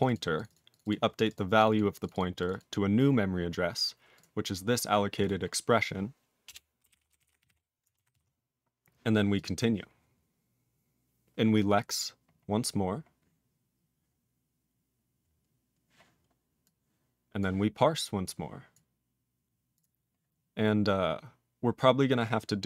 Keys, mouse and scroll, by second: 0.0 click, 0.0 double click, 0.1 double click, 0.4 click, 0.5 double click, 0.5 double click, 0.7 click, 0.7 click, 0.8 double click, 0.9 double click, 1.2 click, 1.2 click, 1.3 double click, 1.3 double click, 1.6 click, 1.6 click, 1.7 double click, 1.7 double click, 2.0 click, 2.0 click, 2.1 double click, 2.1 double click, 2.4 click, 2.4 click, 2.5 double click, 2.5 double click, 4.1 click, 4.2 click, 5.2 click, 5.2 click, 5.6-6.1 scroll down 2, 6.5 Return, 6.6-8.0 typing, 8.2 ctrl+s, 9.3 click, 9.4 click, 12.3-14.1 scroll up 1, 14.1-15.5 scroll up 15, 16.6 click, 17.4 click, 18.2 click, 18.7 click, 19.7 click, 19.8 click, 20.4-21.1 scroll down 6, 21.2-21.7 scroll down 5.